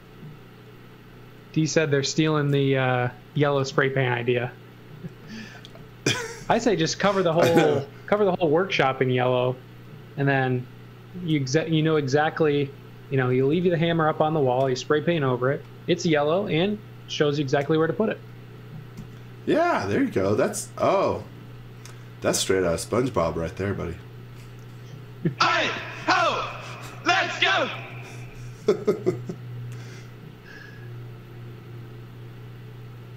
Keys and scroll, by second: 2.4 a, 6.1 x, 6.4 z, 7.4 l, 13.5 z, 15.0 space, 16.4 m, 19.0 e, 21.2 z, 24.2 x, 26.0 z, 28.6 a.